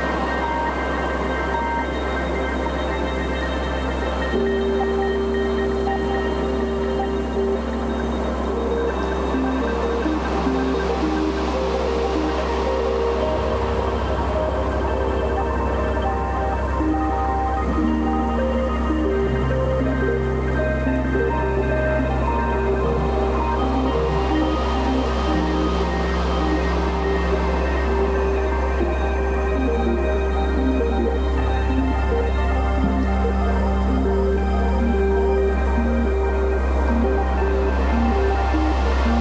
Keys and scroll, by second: 5.0 ctrl+z, 5.2 ctrl+z, 6.1 Delete, 13.1 Return, 27.4 space, 30.8 space, 31.4 Delete, 32.0 ctrl+z, 33.9 space, 38.6 space.